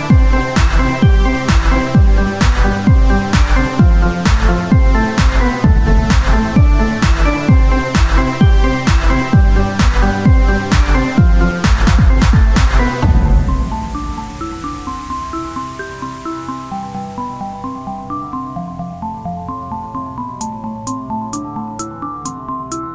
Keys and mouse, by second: 4.2 e, 5.4 r, 6.5 e, 8.5-10.0 drag, 10.7 e, 12.8 z, 12.9-15.2 drag, 18.8 click, 20.8 e.